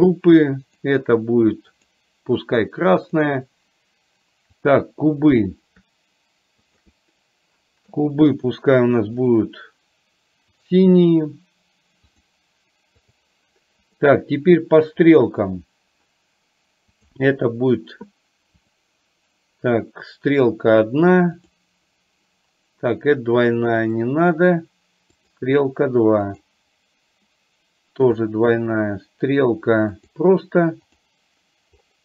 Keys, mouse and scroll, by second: 0.9-2.0 drag, 3.1 click, 6.8 shift+click, 9.3 click, 10.6-12.4 drag, 13.1 click, 13.9 click, 17.1 click, 18.8-20.6 drag, 24.0-25.5 drag, 26.4 click, 28.1-30.3 drag, 31.1 click.